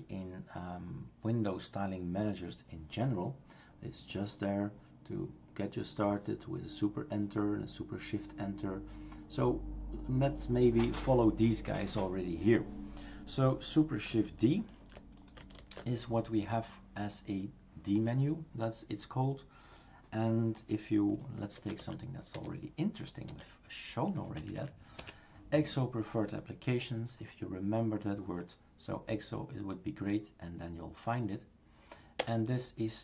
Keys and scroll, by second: 15.6 shift+super+d, 21.6 typing, 24.4 Right, 32.2 Return.